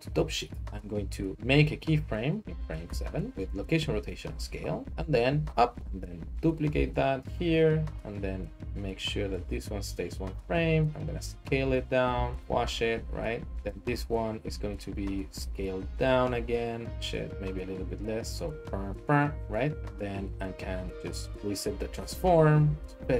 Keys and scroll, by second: 2.9 i, 5.5 g, 8.0 d, 9.4-10.5 typing, 11.6-12.6 typing, 15.4-17.3 typing, 21.3 alt+s, 22.0 s, 22.2 z.